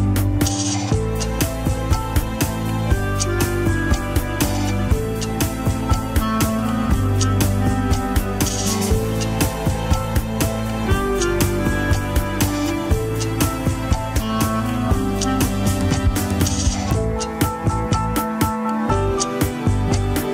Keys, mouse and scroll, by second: 8.6-10.1 drag, 10.1-11.4 middle drag, 11.4 click, 12.3 middle click, 12.7 alt+z, 13.1 alt+z, 13.2 middle click, 13.8 click, 14.2 middle click, 14.7 click, 15.1 middle click, 15.7-16.0 scroll up 1, 16.0 KP_1, 16.3-17.3 scroll up 3, 16.5 shift+middle click, 17.3-18.7 drag, 18.7-19.2 scroll up 1, 19.2-20.2 drag, 20.2 shift+middle click.